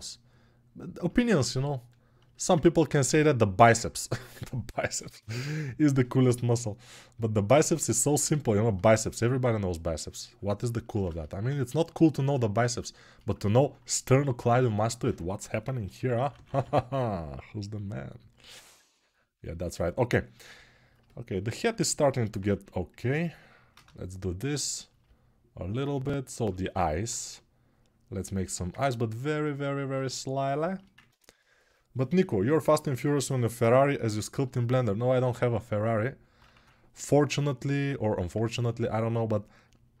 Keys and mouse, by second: 0.8-14.9 right drag, 14.9-20.7 drag, 15.2 g, 22.3 1, 26.5 ctrl+alt+2, 29.7-40.0 shift+right drag.